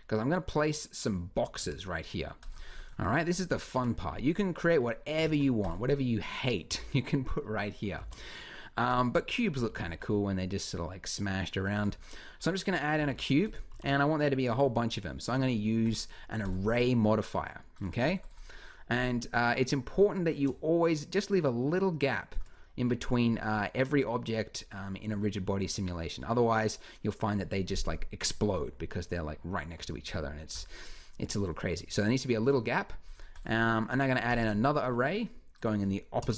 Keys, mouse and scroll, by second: 1.4 Escape, 3.5 KP_Decimal, 5.1 shift+s, 6.5 z, 7.8 shift+a, 9.4 g, 12.8 g, 13.6 g, 22.4 middle click, 23.1-24.8 middle drag.